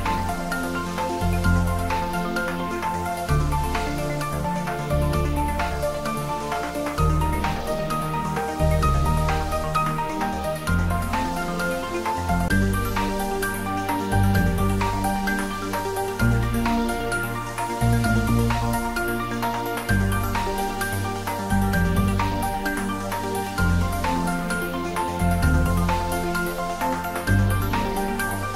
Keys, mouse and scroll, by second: 0.0 s, 0.6 x, 2.8 click, 3.1-3.7 middle click, 3.8 right click, 5.0 click, 5.4 scroll up 1, 5.9-7.8 middle drag, 7.7 scroll down 1, 8.7 click, 9.2-9.6 scroll up 1, 9.7 shift+z, 11.1-11.8 middle click, 11.8 click, 12.4 shift+z, 12.9-13.6 middle click, 13.6-14.1 scroll down 1, 28.2-28.5 middle click.